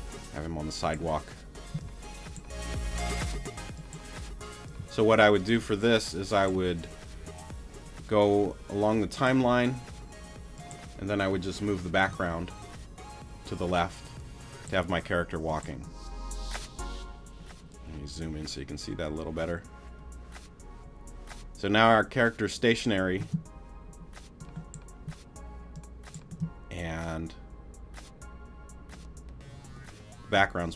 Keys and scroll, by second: 15.7 shift+space, 23.2 space, 26.3 space.